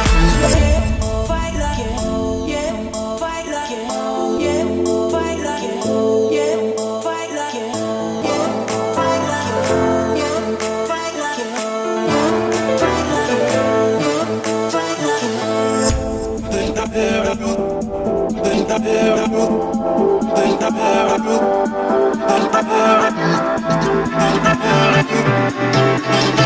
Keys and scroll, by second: 3.1 Escape, 9.7 Return, 10.0 Escape, 10.8 o, 18.1 Escape, 22.6 Return, 23.1 Escape, 25.7 1, 25.8 5, 26.1 Return.